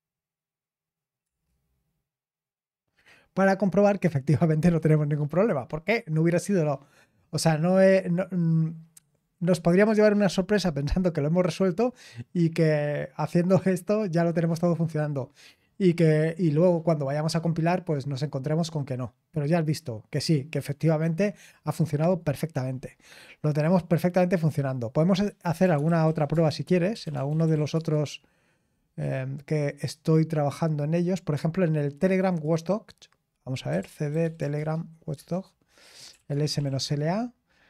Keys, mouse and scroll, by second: 1.2 typing, 27.2-28.0 typing, 32.0 click, 35.9-37.6 typing.